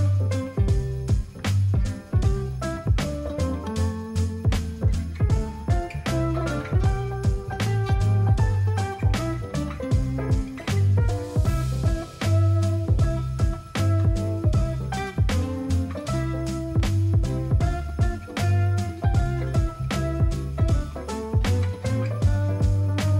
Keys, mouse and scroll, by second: 5.6-6.1 alt+scroll, 14.6-15.5 alt+scroll, 20.9-21.3 alt+scroll up 9, 21.3 alt+scroll, 22.4 alt+scroll.